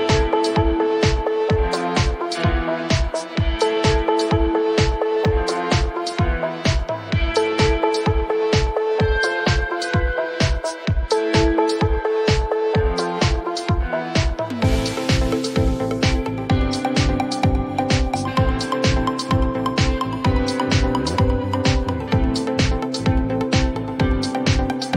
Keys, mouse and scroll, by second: 2.6-5.7 drag, 3.6-6.2 typing, 8.2 click, 8.4 click, 11.2 click, 12.1 click, 13.2 click, 14.2-17.6 drag, 14.3-15.2 typing, 18.7-21.3 drag, 19.6 typing, 20.9-21.2 typing, 23.3 click, 23.4 click.